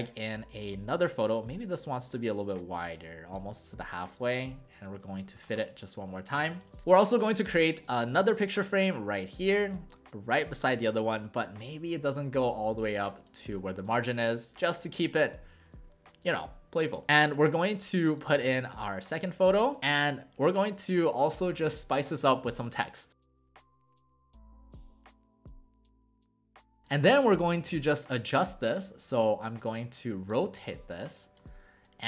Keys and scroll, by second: 19.8 w, 23.5 ctrl+a, 23.5-27.1 typing.